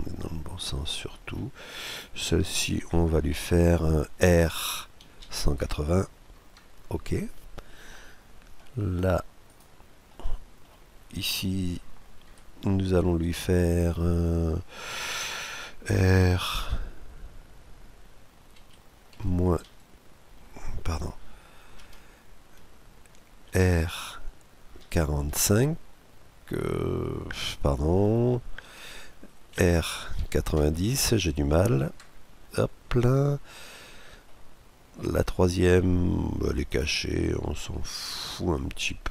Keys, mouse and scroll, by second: 1.6-4.7 right drag, 4.7 r, 7.5-9.3 middle drag, 9.3-10.8 right drag, 9.8-11.7 middle drag, 11.0 right click, 11.7-12.8 scroll up 2, 11.9 KP_Decimal, 12.8-18.2 middle drag, 18.2 r, 23.2 r, 29.3 r, 33.9-35.7 middle drag, 36.3-38.1 right drag, 37.6-39.1 middle drag.